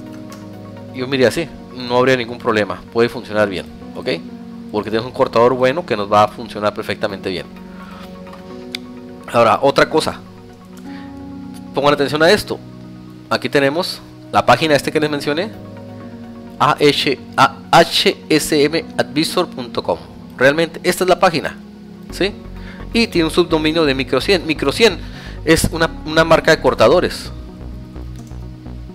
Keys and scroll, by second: 9.7 Tab, 27.0 ctrl+Return.